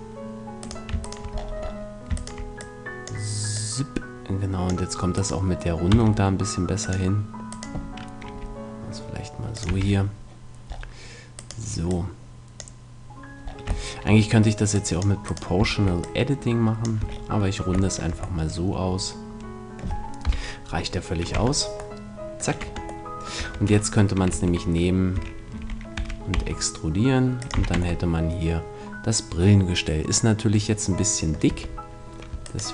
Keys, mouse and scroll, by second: 0.3-1.6 drag, 1.2-3.0 right drag, 1.3 middle click, 2.6 click, 4.1-5.2 drag, 5.4-7.0 right drag, 5.9 x, 8.3-9.3 right drag, 8.3 g, 9.6-11.6 drag, 9.6 a, 11.4 middle click, 11.4-13.1 right drag, 11.8-13.6 drag, 13.6-16.0 middle drag, 14.7-17.2 drag, 15.2-17.2 right drag, 17.0 a, 17.2 middle click, 17.3 click, 17.7 middle click, 20.2 KP_1, 21.3 Tab, 22.0-23.2 middle drag, 22.6 Tab, 23.4 Tab, 24.3 Tab, 25.1 a, 25.6 e, 27.6-29.3 drag, 27.6 a, 27.7 Tab, 28.1-30.4 middle drag, 31.2-32.4 middle drag, 31.5 Tab, 32.4 right click.